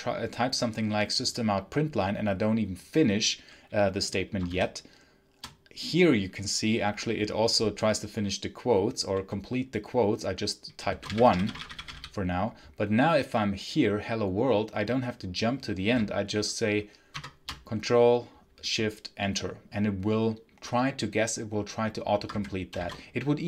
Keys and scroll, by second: 4.4 shift+', 10.5-12.2 typing, 17.0 ctrl+shift+Return, 22.0 Escape, 22.6 shift+c.